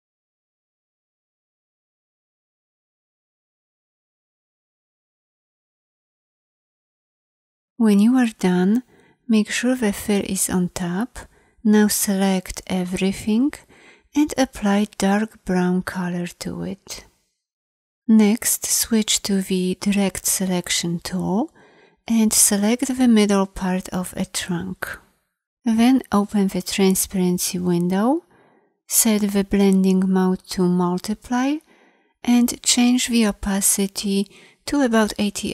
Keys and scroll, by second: 19.5 a.